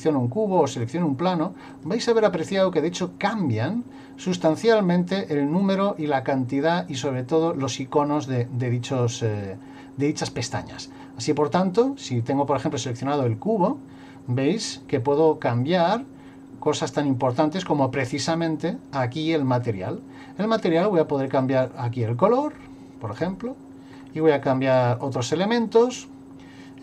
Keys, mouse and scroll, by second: 0.7 click, 1.7 click, 4.4 click, 5.6 click, 17.3 click, 21.3 click, 23.9 scroll down 2.